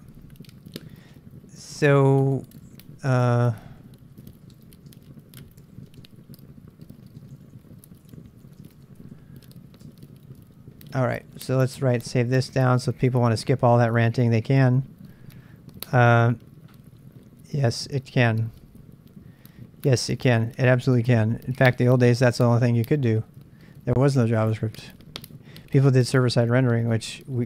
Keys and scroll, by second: 0.1-10.3 typing, 11.4-12.7 typing, 24.3 super+Tab.